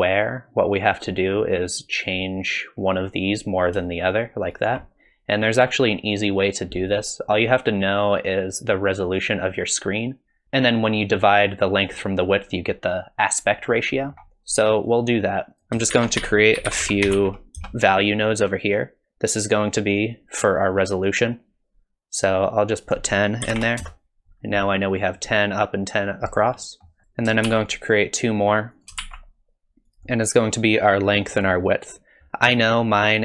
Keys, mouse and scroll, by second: 1.8 click, 3.0 click, 3.8 shift+click, 5.9 click, 10.4 middle click, 14.0 middle click, 14.9 click, 15.6 click, 15.9 shift+a, 20.8 click, 22.8 click, 26.6 middle click, 27.0 middle click, 27.0 click, 27.5 shift+d, 29.0 shift+d.